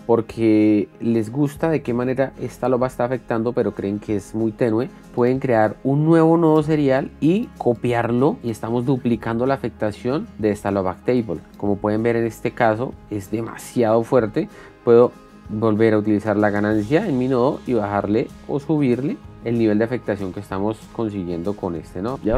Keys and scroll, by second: 7.0 ctrl+v.